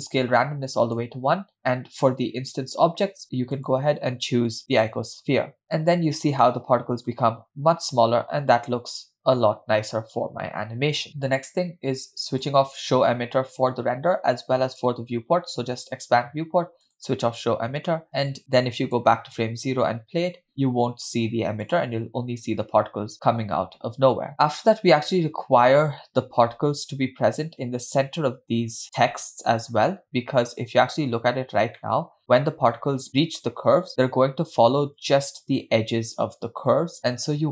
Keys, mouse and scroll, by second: 0.2 click, 1.5-2.5 scroll down 4, 3.6 click, 5.6-6.4 scroll up 4, 5.6 space, 6.6-7.5 middle drag, 9.3-9.6 scroll up 1, 12.6 click, 14.4 click, 15.3 scroll down 1, 17.2 click, 18.0 space, 18.6 click, 20.4-20.8 scroll up 3, 21.8 drag, 22.6-22.9 scroll down 2, 24.4 click, 24.7 scroll up 1, 25.5-25.9 scroll up 1, 30.8-31.3 scroll up 2, 31.8 scroll up 1, 32.2 shift+middle click.